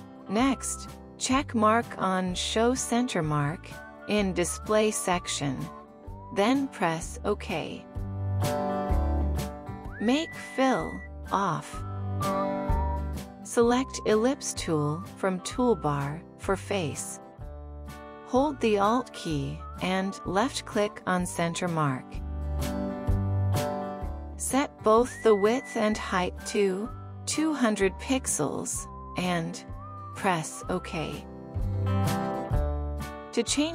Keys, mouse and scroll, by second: 15.8 right click, 23.0 alt+click, 25.6 typing, 27.1-30.7 typing, 28.2 Tab, 29.4 Tab.